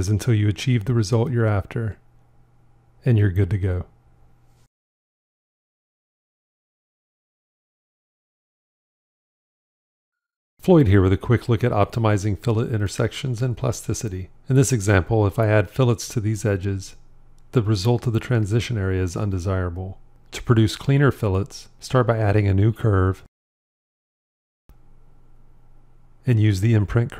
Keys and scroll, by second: 1.4 shift+x, 6.1 shift+x.